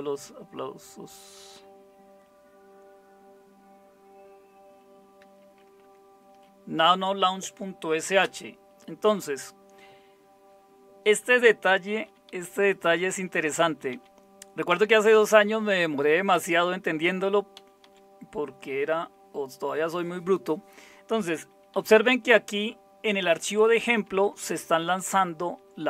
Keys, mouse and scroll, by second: 5.8 Tab, 8.2 Return, 12.4 Down, 12.6 Down, 12.8 Down, 13.0 Down, 13.2 Down, 13.5 Down, 13.7 Down, 13.9 Down, 14.7 Down, 17.5 Down, 17.8 Down, 21.7 Up, 23.3 Right, 23.5 Right, 23.7 Right, 23.8 Right, 24.1 Right, 24.4 Right, 24.6 Right, 24.8 Right, 25.5 Right.